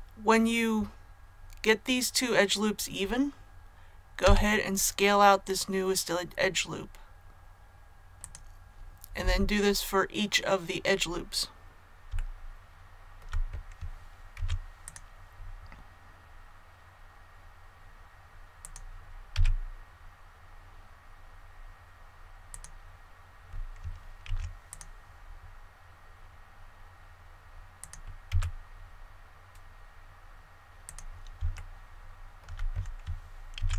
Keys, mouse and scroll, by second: 4.2 s, 12.1 shift+middle click, 14.3 ctrl+r, 14.8 click, 22.5 click, 24.2 ctrl+r, 24.6 click, 28.2 s, 30.8 click, 31.5 shift+middle click, 32.3 shift+scroll up 1, 32.3 shift+scroll down 1, 33.5 ctrl+r.